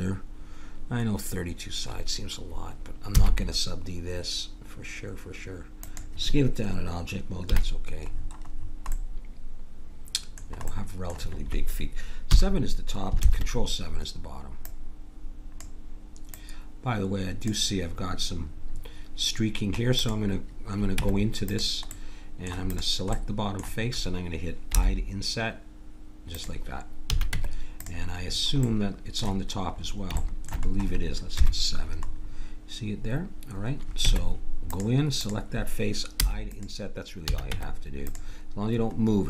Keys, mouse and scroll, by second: 3.2 s, 7.4 KP_Decimal, 8.6-10.7 middle drag, 12.2 KP_7, 13.2 ctrl+KP_7, 14.6-15.9 drag, 21.0 Tab, 21.8 middle click, 22.7 click, 22.7-24.6 middle drag, 22.7 right click, 24.8 i, 27.0 a, 27.3 Tab, 28.6-32.0 middle drag, 31.4 KP_7, 34.0 Tab, 36.2 i, 37.2 a, 37.5 Tab.